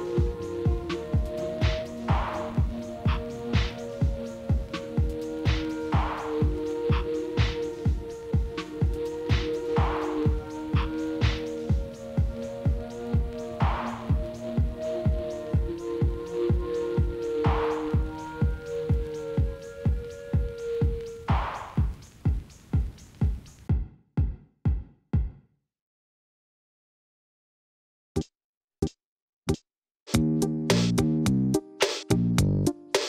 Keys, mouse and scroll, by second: 0.0 ctrl+z, 0.1 ctrl+z, 0.9 ctrl+shift+z, 2.1-3.6 middle drag, 3.7 p, 4.4 Tab, 4.6 click, 5.2 g, 6.6 middle click, 6.9 scroll up 3, 7.8 Tab, 8.2 a, 8.5 e, 10.0 Tab, 10.4 KP_1, 11.0-11.6 scroll down 1, 11.6 shift+d, 13.4 shift+drag, 13.6 shift+click, 13.9-14.5 scroll down 2, 14.5 shift+d, 16.7-17.2 scroll down 3, 17.2 KP_Divide, 17.7-19.1 middle drag, 19.3 KP_7, 19.8-20.3 scroll down 2, 20.3 shift+middle drag, 20.6-21.5 scroll up 3, 21.5-22.6 shift+middle drag, 22.6 ctrl+z, 22.8 ctrl+z, 24.1 KP_Divide, 24.3 KP_Divide, 24.7 KP_Divide, 25.3-26.8 middle drag, 27.4 ctrl+j, 29.1 shift+z, 29.9 KP_Divide, 30.7 g.